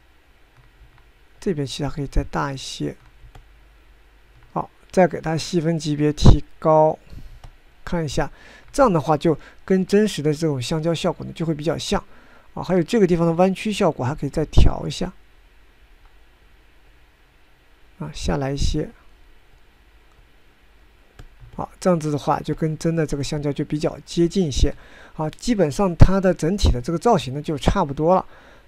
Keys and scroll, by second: 15.0 f, 17.2 f.